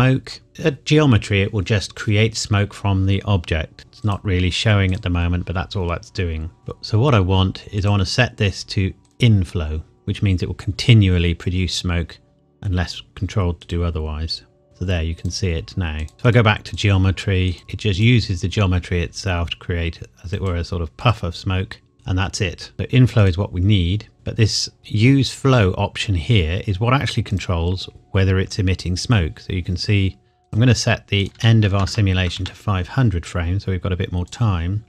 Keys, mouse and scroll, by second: 3.8 click, 7.8 click, 13.6 click, 16.1 middle click, 16.2 click, 20.3 click, 22.7 click, 27.3 click, 30.4 click, 31.3 KP_5, 31.7 KP_0, 32.3 KP_Enter, 34.3 click.